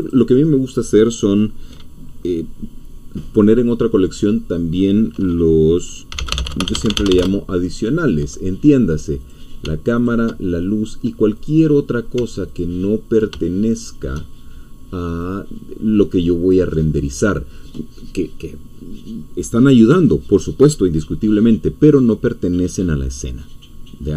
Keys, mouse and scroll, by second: 0.0 click, 5.8-7.6 typing, 9.2 click, 10.0 ctrl+click, 11.3 click, 12.6 ctrl+click, 13.7 shift+click, 15.3-16.9 drag.